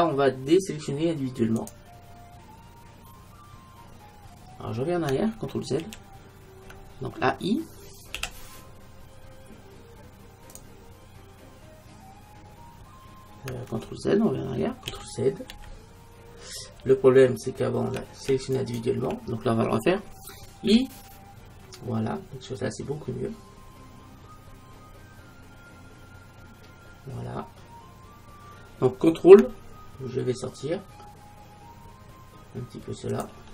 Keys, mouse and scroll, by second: 0.2 click, 1.6-3.4 drag, 3.9 middle click, 5.9 ctrl+z, 8.2 i, 10.7-12.4 drag, 14.9 ctrl+z, 15.6 ctrl+z, 16.8 ctrl+z, 18.6-20.6 right drag, 33.3-33.5 drag.